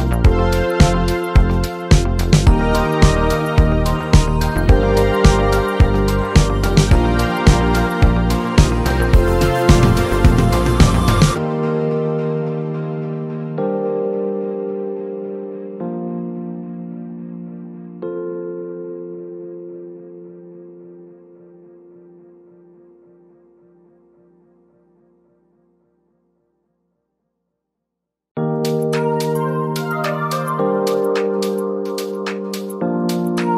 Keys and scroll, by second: 16.4 z, 19.0 space, 28.4 ctrl+t.